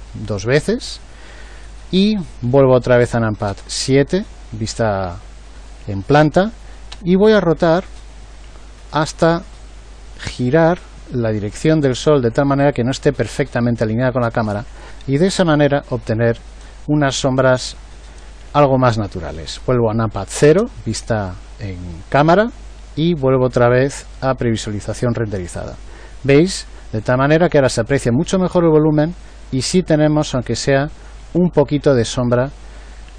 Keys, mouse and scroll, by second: 3.4 KP_7, 6.9 r, 20.4 KP_0.